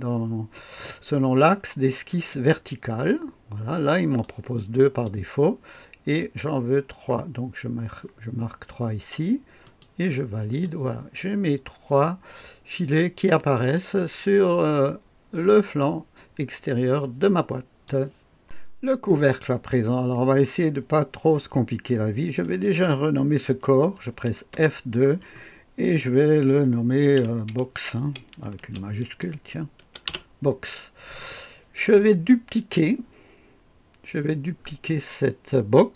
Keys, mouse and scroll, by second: 2.0 click, 2.6 click, 4.1 click, 6.6-9.6 scroll up 2, 9.6 click, 10.6-17.8 drag, 22.4 click, 22.7 click, 24.4 F2, 28.6-29.8 typing, 30.0 Return.